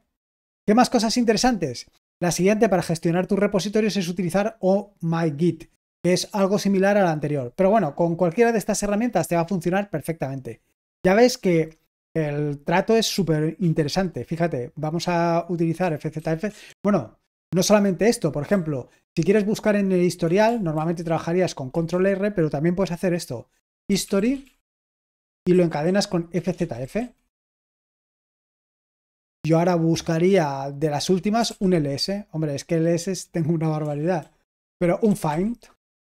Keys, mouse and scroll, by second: 0.8-1.9 scroll down 1, 5.2-7.3 scroll down 1, 7.8-11.2 scroll up 1, 11.2-12.6 drag, 13.6 ctrl+l, 15.8-16.4 typing, 18.5 typing, 20.2 BackSpace, 20.7 ctrl+r, 21.7 Escape, 23.4-27.4 typing, 31.4 typing, 33.8-35.8 typing.